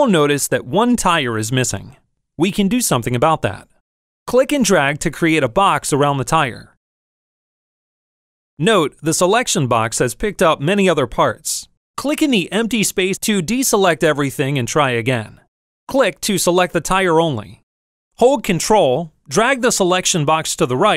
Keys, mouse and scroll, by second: 6.7-7.8 drag, 14.5 click, 15.7 click.